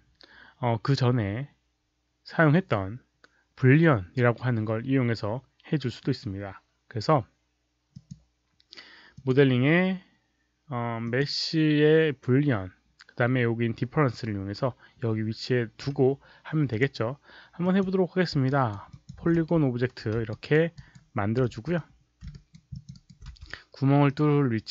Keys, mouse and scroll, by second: 7.8 click, 9.1 click, 10.9 click, 16.6 click, 17.5 click, 18.4 alt+right click, 18.8 alt+click, 19.1-19.8 typing, 20.2 alt+right click, 20.7 alt+right click, 21.5 r, 21.7-22.1 middle drag, 22.2 alt+right click, 22.6 alt+click, 22.9 alt+right click, 23.2 w, 24.0-24.6 drag.